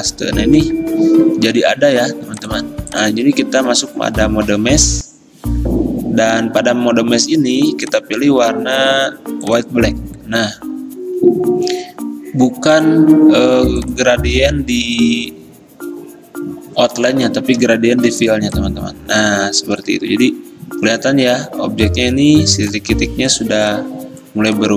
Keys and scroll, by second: 18.2 g.